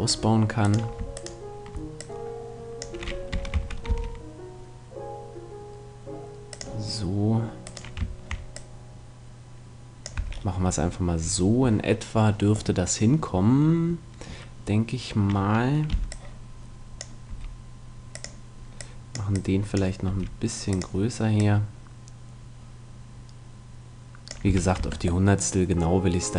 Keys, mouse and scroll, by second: 0.6-3.0 right drag, 2.0-3.8 drag, 3.3 r, 6.7-8.4 drag, 7.6 right click, 9.6 click, 10.2 a, 15.9 b, 17.2 s, 18.2-23.1 drag, 20.0 s, 24.4 a, 24.8 Tab, 25.2-26.3 middle drag.